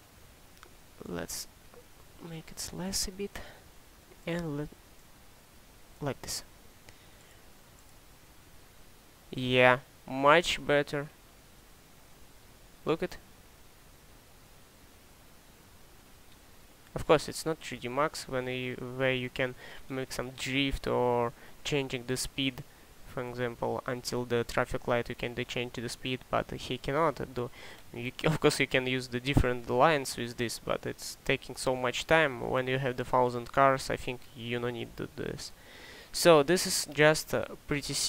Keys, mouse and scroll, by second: 22.5 ctrl+click, 22.7 ctrl+shift+click.